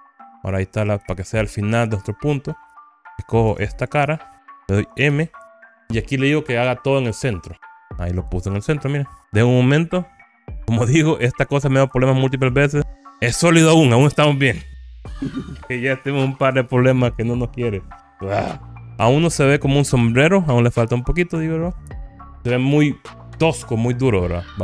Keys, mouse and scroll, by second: 0.0 click, 0.9-1.9 middle drag, 3.6 3, 4.0 click, 5.2 m, 8.2 middle click, 9.2-9.8 scroll down 10, 11.3 n, 12.6 click, 12.8 click, 18.7 click, 18.7 scroll up 2, 19.4 shift+middle click, 20.0 shift+scroll down 1, 21.1 KP_1, 22.0 click.